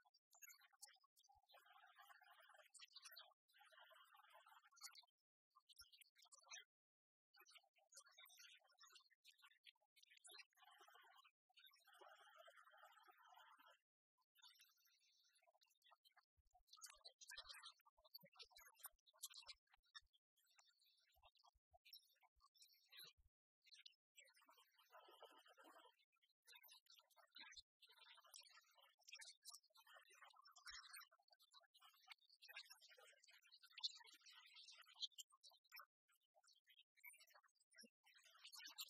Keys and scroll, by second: 17.0 ctrl+t, 28.9 Return.